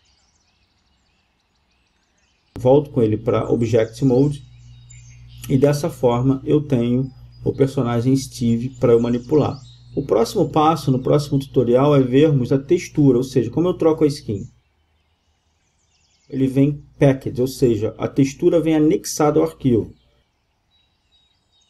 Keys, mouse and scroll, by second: 0.4 g, 1.1-5.4 drag, 5.5 right click, 6.1-9.0 drag, 9.0-10.8 right drag, 10.8-21.6 drag.